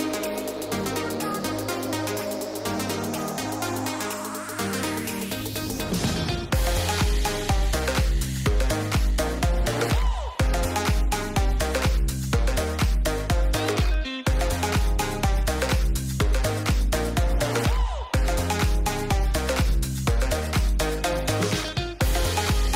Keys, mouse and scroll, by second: 2.7 shift+middle click, 3.1-3.5 middle drag, 4.8 shift+middle click, 5.6 click, 6.2 click, 6.7 click, 7.7-8.9 drag, 9.3 click, 12.6 click, 16.2 click, 17.9 click, 18.3 click, 19.4 click, 19.9 click, 20.4 click, 20.8 click, 21.5 click, 21.9 click.